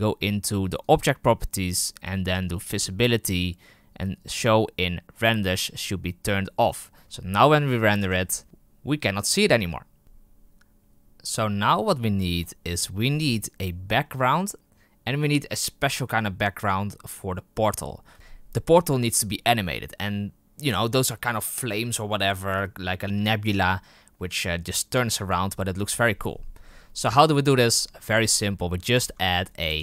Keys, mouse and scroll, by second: 5.1 click, 27.8-29.4 scroll down 4, 29.4 right click.